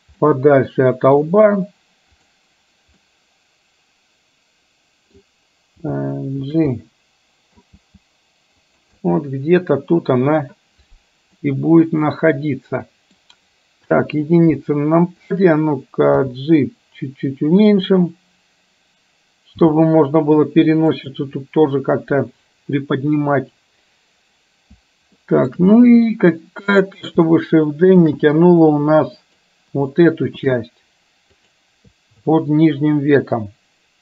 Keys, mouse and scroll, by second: 0.3-1.3 middle drag, 2.3 click, 3.1-5.3 middle drag, 6.9 middle click, 7.8 g, 9.0-10.4 middle drag, 11.5-13.3 middle drag, 14.0 KP_1, 15.3 click, 16.1 g, 19.8 g, 25.3 shift+middle click, 26.9 click, 28.1 shift+d.